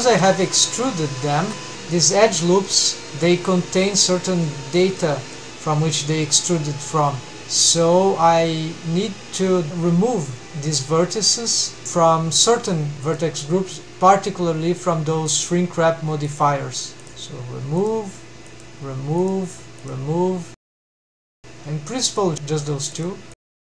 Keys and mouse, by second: 0.2 1, 1.7-2.2 middle drag, 2.5 middle drag, 3.3-4.0 middle drag, 4.5 middle click, 5.4 middle click, 5.5 middle click, 10.0 middle drag, 10.4-11.0 middle drag, 15.9 drag, 17.8 click, 18.6 drag, 19.3-19.8 drag, 20.0 click, 20.6 click, 21.4 drag, 21.8 middle click, 22.9 click, 23.3 click.